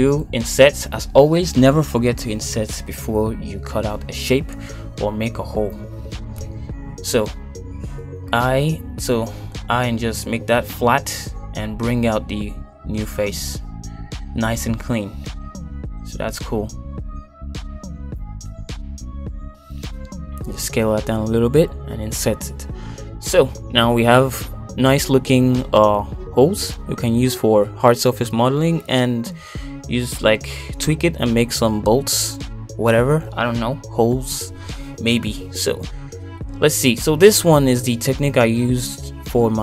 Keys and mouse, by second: 0.3 shift+middle click, 1.2 i, 5.0 middle click, 6.0 e, 8.2 middle click, 8.9 shift+middle click, 9.4 middle click, 10.8 i, 13.7 middle click, 14.1 e, 16.2 middle click, 16.8-17.8 middle drag, 18.1 middle click, 18.7 g, 20.9 s, 22.5 middle click, 23.1 i, 25.0 Tab, 25.5 middle click, 27.2 middle click, 28.9 shift+middle click, 30.8 middle click, 32.5 Tab, 33.3 shift+middle click.